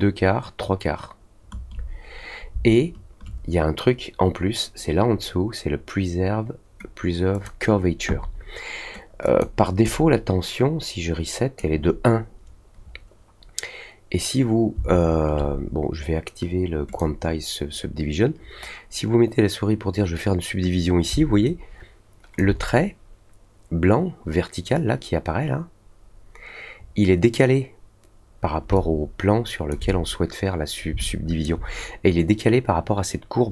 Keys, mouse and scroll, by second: 7.3 click, 9.2 click, 9.8-11.5 right drag, 16.8 click, 21.4-22.3 alt+drag, 28.7-29.6 alt+drag, 31.0-31.4 alt+drag.